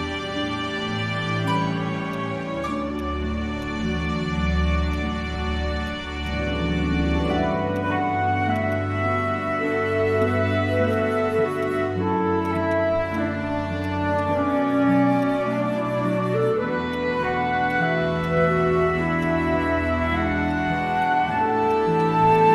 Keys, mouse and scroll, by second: 8.5 right click, 12.5 double click, 14.3 double click, 18.4 double click.